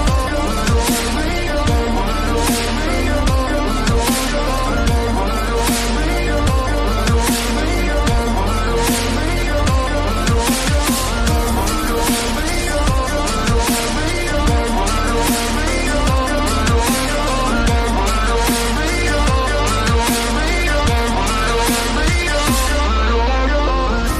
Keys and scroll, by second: 6.3 Return, 6.4 ctrl+a, 9.4 ctrl+a, 9.4 ctrl+d.